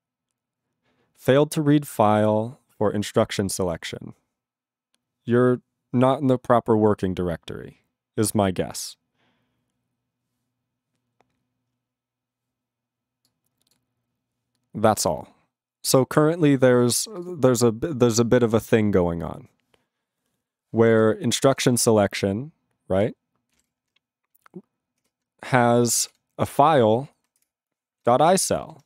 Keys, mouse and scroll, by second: 20.9 ctrl+s, 21.0 click, 21.5 ctrl+s, 27.5 ctrl+Return, 28.7 ctrl+g.